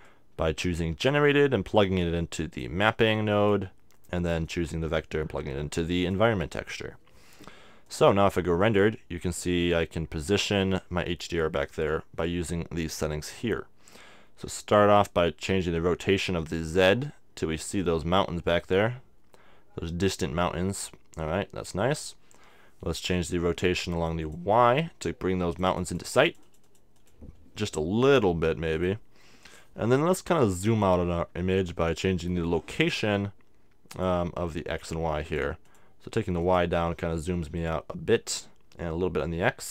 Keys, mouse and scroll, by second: 0.0-1.9 drag, 3.1-6.4 drag, 7.8-9.7 drag, 15.4-17.1 drag, 23.9-30.5 drag, 32.8-39.3 drag.